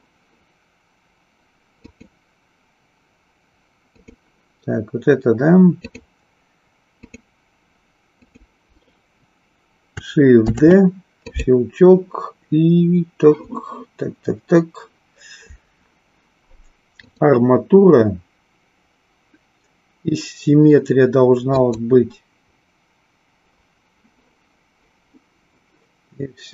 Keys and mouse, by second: 1.9 click, 3.9 click, 6.0 click, 6.8 click, 10.5 shift+d, 11.2 click, 16.9-21.9 drag.